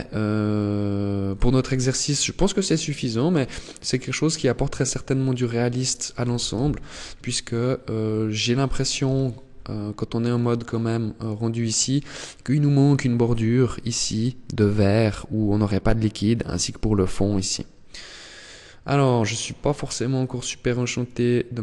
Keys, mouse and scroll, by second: 0.4 click, 1.2-1.8 scroll down 2, 1.7 middle click, 2.5 scroll down 4, 3.2 middle click, 5.6 alt+h, 6.1 Tab, 7.4 middle click, 8.3 KP_0, 9.5 click, 9.8 click, 18.0 click, 18.8 click, 20.1 click, 20.9 click.